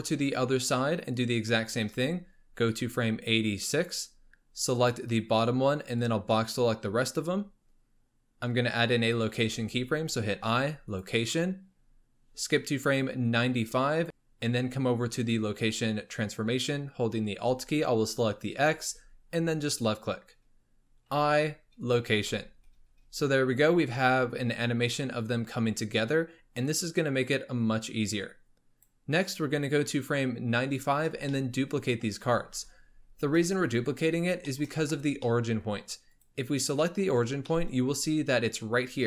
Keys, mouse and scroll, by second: 2.7-4.9 drag, 6.0 click, 12.4-14.0 drag, 18.5-19.9 alt+drag, 24.0-27.0 drag, 30.9-31.3 scroll down 2, 31.3-34.4 shift+middle drag, 34.5-36.1 shift+middle drag, 36.1 click, 36.7 scroll down 1, 36.8-37.9 middle drag, 37.9-38.8 scroll up 1.